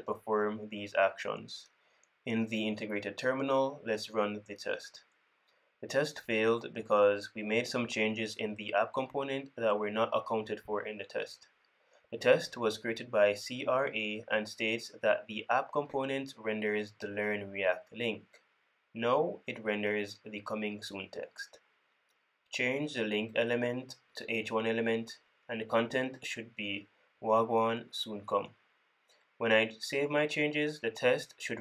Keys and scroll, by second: 7.6 super+p, 12.3 super+p, 22.8 super+d, 24.5 super+z, 26.6 super+c, 27.7 super+c, 30.2 super+v.